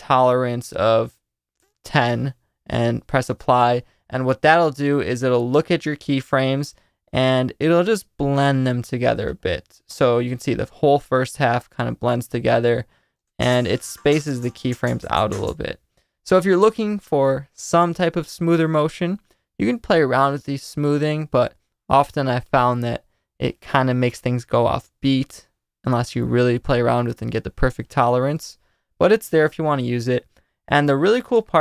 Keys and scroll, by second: 1.4-2.3 typing, 13.2 space, 15.4 space.